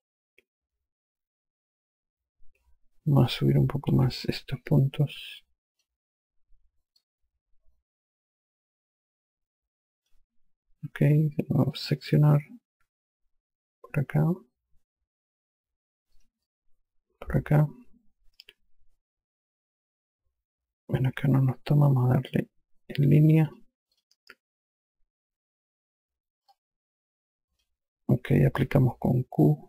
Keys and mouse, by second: 4.5 5, 5.3 click, 7.5 click, 12.4 click, 16.7 click, 24.0 click, 27.1 click.